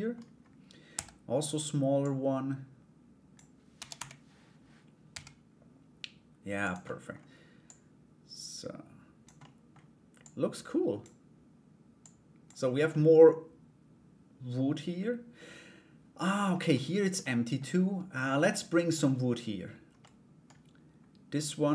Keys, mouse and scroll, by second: 1.6-6.4 drag, 6.4 middle click, 6.7-7.2 scroll down 1, 7.2-8.8 drag, 9.0 middle click, 9.3-9.8 scroll down 1, 9.8 click, 11.6 click, 12.5 scroll up 1, 12.6-16.0 middle drag, 16.0-16.3 scroll down 1, 16.3 middle click, 16.8 middle click, 18.0 middle click, 19.6 middle click, 20.9 right click.